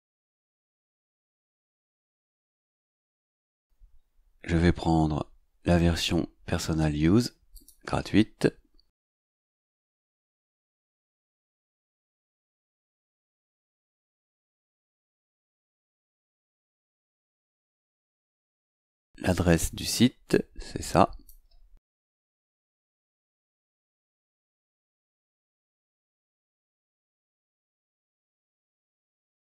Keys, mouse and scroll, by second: 7.5 click, 12.3-13.6 drag, 15.6 click, 18.7 click, 20.2 click, 21.9 right click, 24.3 click, 25.3 click, 26.7 right click, 27.8 click.